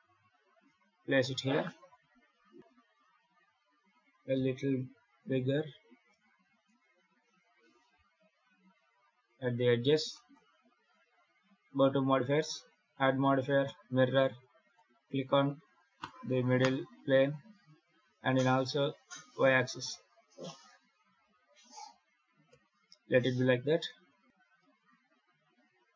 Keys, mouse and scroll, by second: 4.2 s, 6.3 g, 10.0 shift+middle click, 11.5 click, 12.1 click, 14.5 click, 18.1 click, 19.2 click, 19.6 click, 20.1 scroll down 2, 20.3 middle click, 22.3 KP_7, 24.2 ctrl+z.